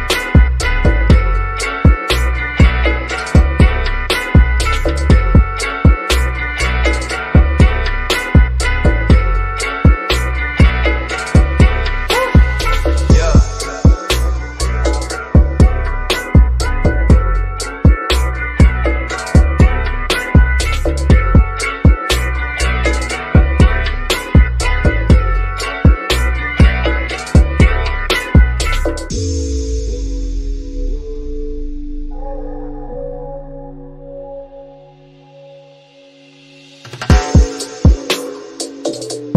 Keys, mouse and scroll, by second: 1.3 shift+click, 2.1-5.2 shift+middle drag, 5.2 click, 5.9 scroll down 1, 9.0 ctrl+shift+m, 10.3-10.6 scroll up 1, 11.5 click, 13.2 click, 17.3 ctrl+shift+m, 19.0 click, 21.3-21.7 scroll up 1, 23.5 scroll down 1, 23.7 click, 25.7-26.1 scroll down 1, 26.5-27.9 shift+middle drag, 27.9 scroll up 1, 28.6-31.5 shift+middle drag, 31.5 click, 33.2-33.8 scroll down 1, 33.8 click, 34.6-36.9 shift+middle drag, 36.9 click.